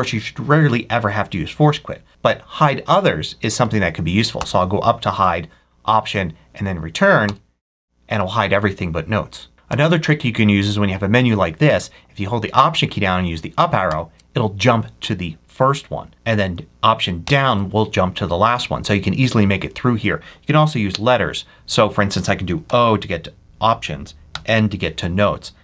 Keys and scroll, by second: 4.3 alt+Up, 5.1 alt+Up, 7.1 alt+Return, 9.6 Up, 13.8 alt+Up, 17.1 alt+Down, 24.2 n.